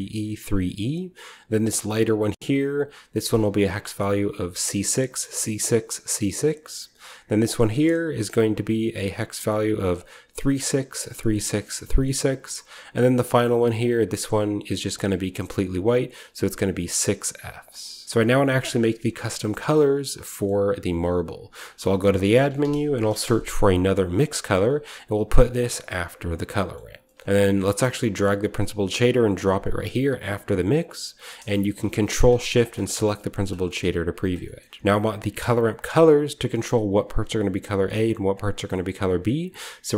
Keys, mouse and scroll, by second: 1.6 click, 2.4 click, 7.1 click, 7.9 click, 9.0 click, 9.7 click, 12.1 click, 13.2 click, 13.6 click, 14.2 click, 15.1 click, 18.0-19.0 scroll down 2, 18.3 shift+middle drag, 18.7-19.1 shift+middle drag, 19.2 middle drag, 19.6 middle click, 20.3-21.5 middle drag, 20.3-21.4 scroll up 1, 21.4-22.3 shift+scroll up 1, 21.5-24.0 typing, 21.6 shift+middle click, 21.7 click, 24.0-25.3 drag, 25.4-27.2 drag, 27.5-30.4 drag, 30.6-32.5 drag, 32.6 click, 33.3-35.5 drag, 34.0-34.3 middle drag, 34.4 middle click, 34.4-38.0 scroll up 1, 34.5-35.3 typing, 38.6-39.9 middle drag, 38.9-39.9 drag.